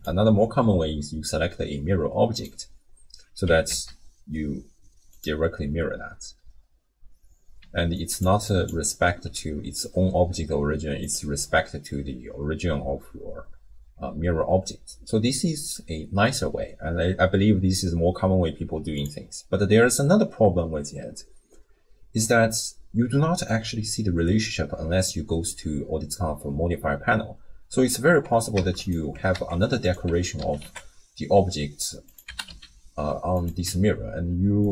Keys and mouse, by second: 3.5 g, 7.6-9.1 d, 7.9 click, 8.5 click, 9.2 d, 11.0 click, 28.5 shift+d, 29.1 g, 30.1 Tab, 30.4 s, 32.3 g, 33.7 Tab, 34.6 click.